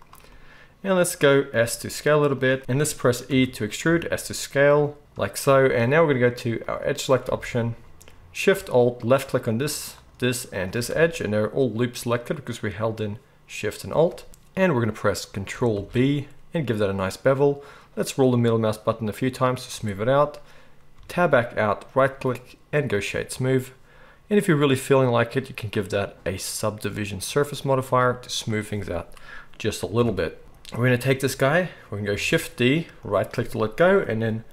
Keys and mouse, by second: 1.5 s, 2.6 ctrl+z, 2.6 f, 3.3 e, 6.7-9.1 drag, 6.7-9.1 middle drag, 7.4 alt+a, 15.7 ctrl+b, 20.9 Tab, 25.2-33.1 middle drag, 30.0 KP_1, 32.2 shift+d, 33.1-34.5 drag.